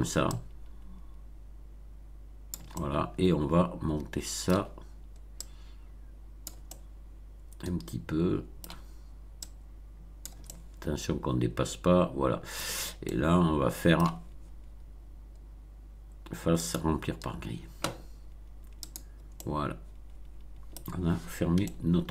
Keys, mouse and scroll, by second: 0.3-2.6 drag, 2.7-4.6 middle drag, 5.3-6.6 drag, 6.6-8.8 middle drag, 9.4 click, 10.4-12.8 middle drag, 13.0-14.1 middle drag, 16.6 click, 18.8 click, 19.3-20.9 middle drag, 21.5 shift+middle click.